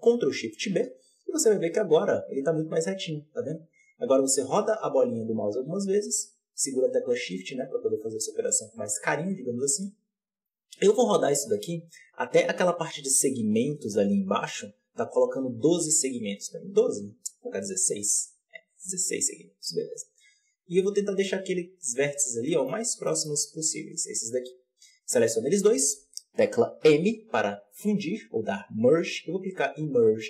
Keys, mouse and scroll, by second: 0.4 ctrl+shift+b, 22.1 scroll up 2, 22.4 shift+middle click, 22.7-23.9 scroll up 4, 22.9 shift+middle click, 23.9-26.7 drag, 26.7 m.